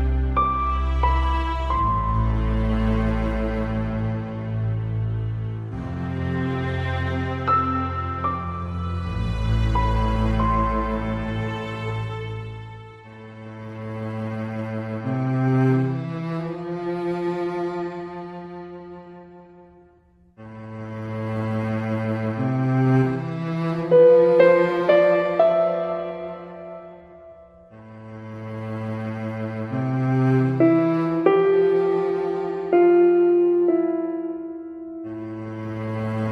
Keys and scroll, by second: 19.1 ctrl+z.